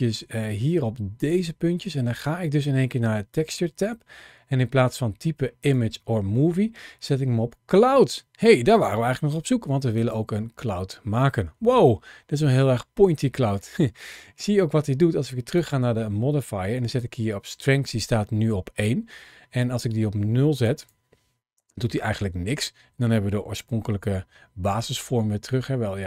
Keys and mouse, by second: 1.0 click, 5.4-10.1 drag, 11.8-13.4 middle drag, 15.4 click, 19.4-20.5 drag, 20.6 click, 23.5 shift+middle click, 23.9-24.8 middle drag.